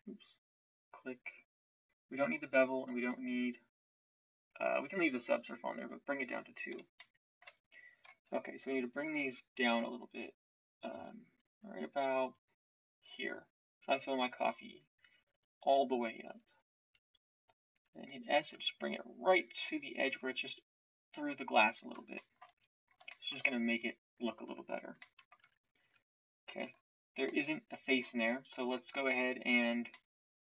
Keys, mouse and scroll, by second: 7.6-13.0 middle drag, 17.7 s, 25.4 Tab, 25.8 Tab, 26.6 z, 27.2 z.